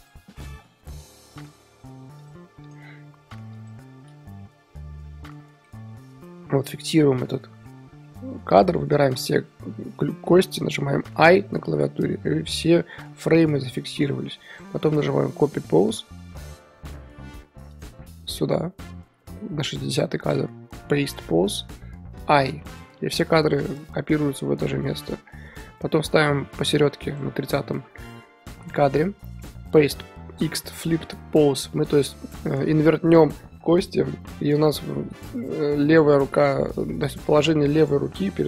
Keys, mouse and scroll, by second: 0.5 click, 0.6 r, 1.5 click, 1.7 r, 2.7 click, 2.8 r, 4.1 a, 4.2 scroll down 4, 4.4-6.2 middle drag, 6.2 i, 6.5-8.9 middle drag, 8.9 a, 10.0-11.1 middle drag, 11.1 i, 17.7-21.1 drag, 21.1 right click, 22.2 i, 24.6-27.0 middle drag, 27.0-38.4 drag.